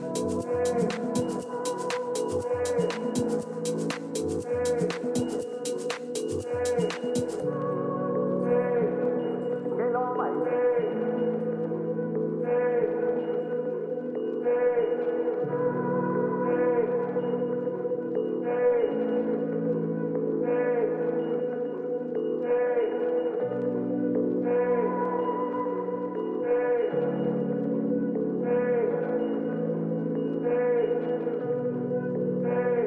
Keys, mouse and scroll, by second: 1.3 a, 1.6 a, 2.3 b, 3.5-5.3 drag, 4.4 a, 4.9 b, 6.1-7.9 drag, 7.6 a, 7.9 b, 9.2-11.0 drag, 11.2 a, 12.9 middle click, 13.0 middle click, 13.9-20.7 middle drag, 18.2 a, 18.5 a, 19.6 b, 21.6-23.4 drag, 23.0 a, 23.4 b, 24.7-26.0 drag, 26.0 a, 26.4-28.1 middle drag, 29.2-30.7 middle drag, 30.7 ctrl+KP_1, 32.2 middle click.